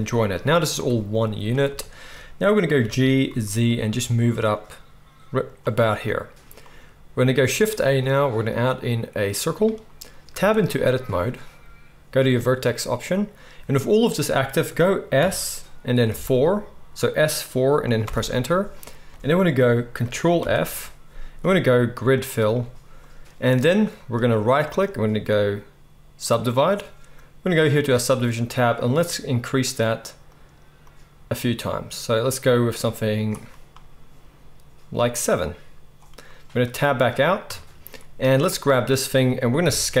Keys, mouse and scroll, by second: 0.7 g, 1.2-2.0 middle drag, 2.7 g, 7.4 shift+a, 10.3 Tab, 12.3-24.1 drag, 15.1 s, 19.1-27.6 middle drag, 19.1-24.1 right drag, 20.4 ctrl+f, 26.8 click, 26.8 right click, 27.7 click, 27.7 middle click, 27.7 right click, 35.1-38.6 middle drag, 37.4 Tab, 37.4-38.6 drag, 37.4-40.0 right drag, 39.6 KP_1.